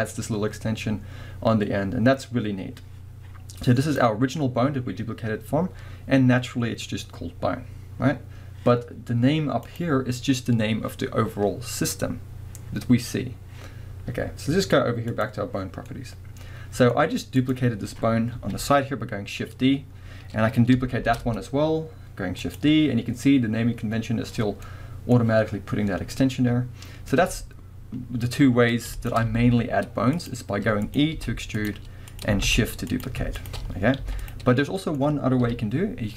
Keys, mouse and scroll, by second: 3.9 click, 9.6 click, 15.1 click, 15.9-17.4 middle drag, 17.4 click, 18.4 KP_1, 21.0 shift+d, 22.6 click, 24.7-29.0 middle drag, 29.0 shift+click, 29.3 x, 30.8 click, 31.2 e, 32.1 click, 32.4 shift+d, 33.4 shift+click, 34.0 x, 34.8-36.1 middle drag, 35.4 KP_1.